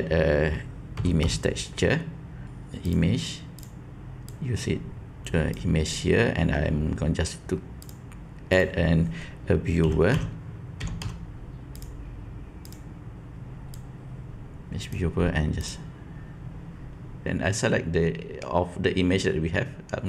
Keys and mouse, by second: 4.2-5.5 drag, 7.7-12.7 drag, 13.6-14.9 drag, 15.5 click, 17.2-20.0 drag.